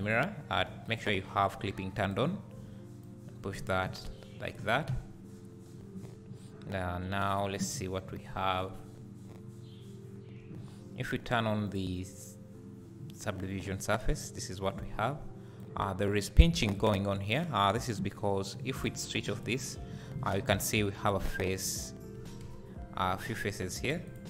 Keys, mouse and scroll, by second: 0.0 click, 0.9 click, 2.0 click, 3.0-7.4 drag, 4.6 Tab, 7.7-8.1 scroll down 1, 11.6 click, 13.8-14.2 scroll up 1, 15.6-18.8 drag, 16.4 scroll up 1, 19.3 click, 19.6 click, 20.2 Tab, 20.8 3, 21.0 2, 21.2 click, 22.4 KP_Decimal, 24.1 ctrl+click.